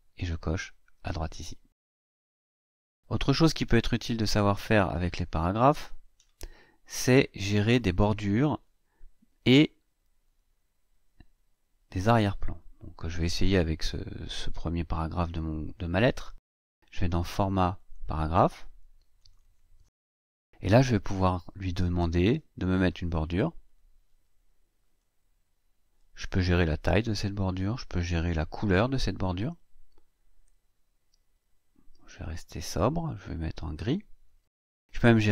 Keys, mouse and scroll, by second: 5.2 click, 10.0-12.2 drag, 17.6 click, 19.0 click, 23.5 click, 24.7 click, 26.6 click, 27.0 click, 27.9 click, 33.6 click.